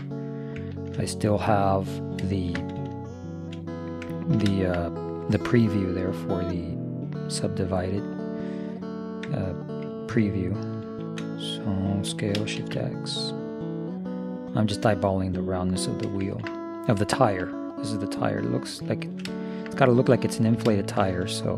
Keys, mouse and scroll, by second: 3.4 right click, 6.1-8.0 drag, 10.9 ctrl+,, 12.2 s, 16.3-21.5 middle drag.